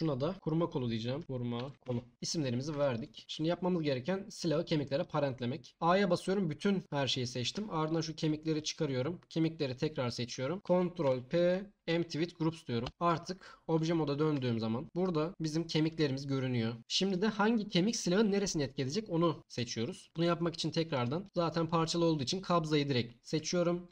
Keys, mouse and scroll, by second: 3.2 ctrl+p, 5.7 a, 7.9 shift+click, 8.5 shift+click, 9.7 shift+click, 11.0 ctrl+p, 13.1 Tab, 14.3 Tab, 19.5 Tab, 20.1 Tab, 20.9 click, 21.2 middle click, 23.4 Tab.